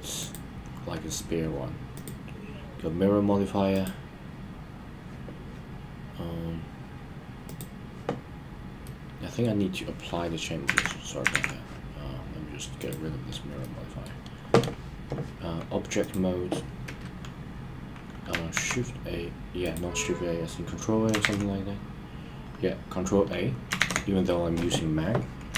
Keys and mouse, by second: 3.7 click, 7.5 click, 8.8-9.5 middle drag, 10.8 super+z, 11.3 super+z, 12.8 click, 13.6 middle click, 18.5 alt+a, 24.2 ctrl+a.